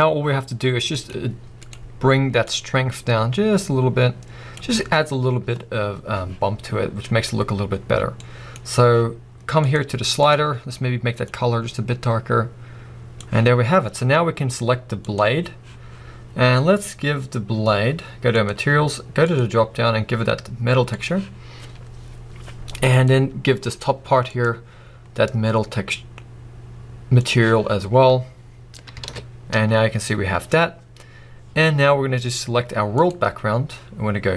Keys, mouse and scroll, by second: 2.6 click, 5.2 scroll down 1, 9.7 click, 13.5-14.3 scroll up 1, 15.2 click, 22.2-22.9 scroll down 1, 23.1 click, 29.2 a, 30.2 scroll down 1, 33.1 click.